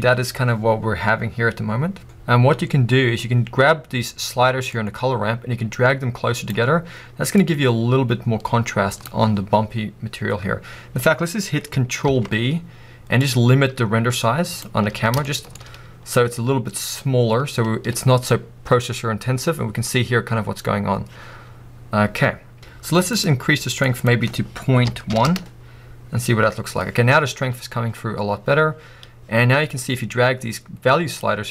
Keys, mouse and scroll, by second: 0.8-3.8 middle drag, 4.8-15.2 drag, 12.5 ctrl+b, 15.2-25.4 shift+middle drag, 15.6 scroll up 1, 21.8 scroll down 2, 25.4-31.5 drag, 25.6 Return.